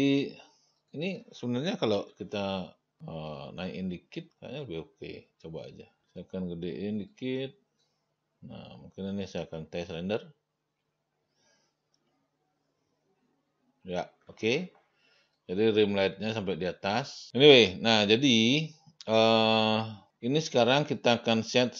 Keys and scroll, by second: 2.2 t, 6.0 t, 6.2 r.